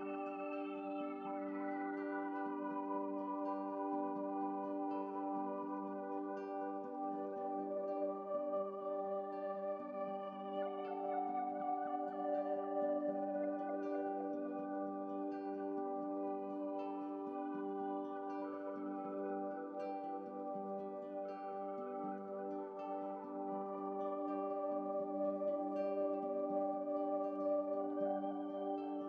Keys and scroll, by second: 1.9 ctrl+z, 2.9 Up, 3.0 Up, 3.2 Left, 3.2 Right, 3.3 Left, 3.3 Right, 3.3 Down, 8.2 -.